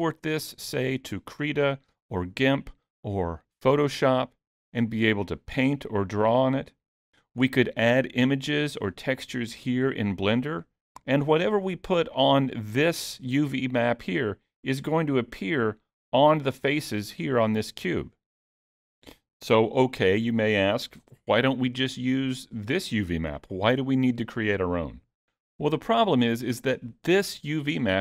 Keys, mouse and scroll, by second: 15.3-16.5 scroll up 7.